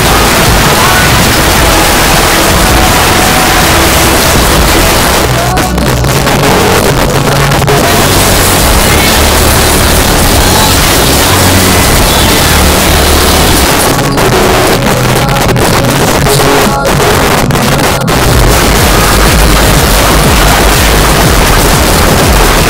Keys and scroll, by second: 5.0 Page_Down, 13.6 Page_Down.